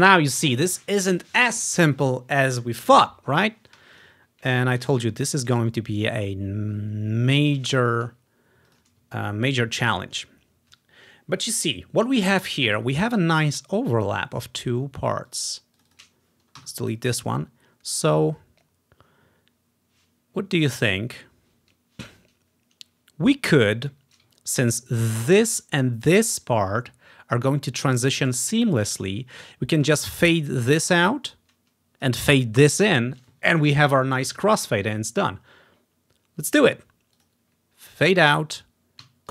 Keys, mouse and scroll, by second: 4.0 click, 5.1 ctrl+scroll up 2, 8.8-10.9 drag, 9.2-9.7 ctrl+scroll down 1, 9.7 ctrl+scroll up 1, 13.1 scroll up 2, 15.4-17.7 drag, 16.7 Delete, 24.5-24.8 ctrl+scroll up 1, 28.7 scroll down 2, 29.5 scroll down 1, 29.7-30.5 scroll up 1, 30.5 scroll up 1, 30.7-33.4 drag, 37.3-39.2 drag.